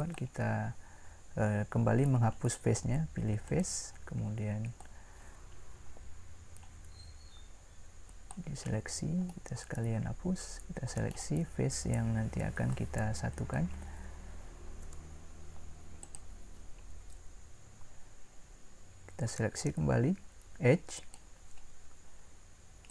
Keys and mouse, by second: 3.5-4.5 drag, 6.2-9.7 drag, 14.8 Delete, 21.0-22.9 drag.